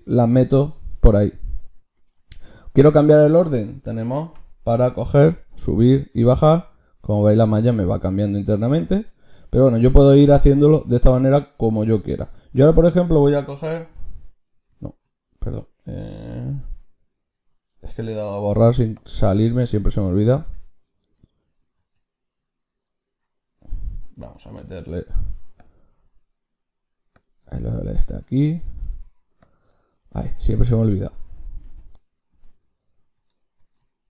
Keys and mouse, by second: 18.9-20.3 drag, 20.3 Tab, 20.4-23.5 drag, 21.7 ctrl+z, 24.9 ctrl+shift+q, 28.0 click, 29.3-31.5 drag, 30.2 ctrl+z, 31.5 Tab, 33.5 ctrl+shift+q.